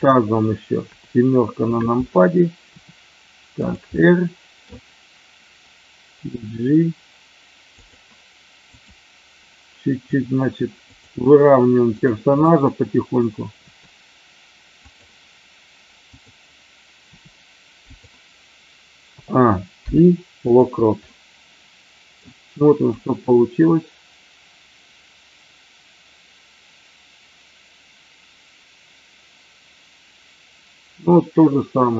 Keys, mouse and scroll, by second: 2.7 r, 3.5 click, 3.9-4.5 middle drag, 6.1 g, 7.8 click, 8.6 click, 10.0 r, 10.9 click, 11.9 click, 12.5 middle click, 13.6 r, 14.8 click, 17.1 r, 17.8 click, 19.0 a, 19.8 i, 21.0-22.1 middle drag, 21.9 typing, 22.9-31.9 drag.